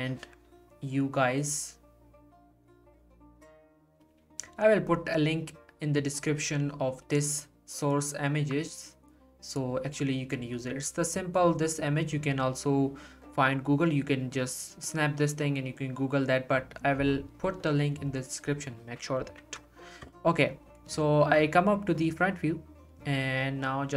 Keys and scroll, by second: 19.2 Delete, 19.2 1.